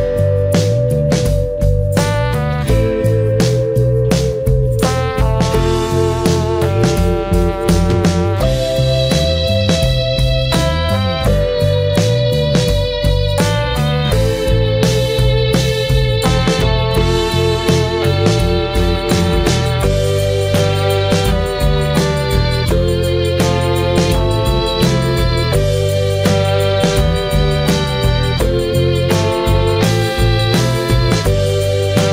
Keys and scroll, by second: 20.6 ctrl+z.